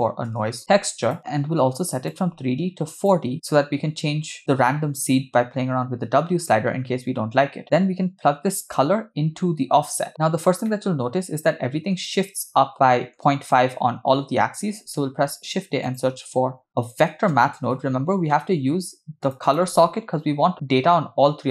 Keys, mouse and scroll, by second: 2.0-3.2 drag, 8.8-9.9 drag, 10.7-12.0 middle drag, 12.7-13.3 middle drag, 15.0 shift+a.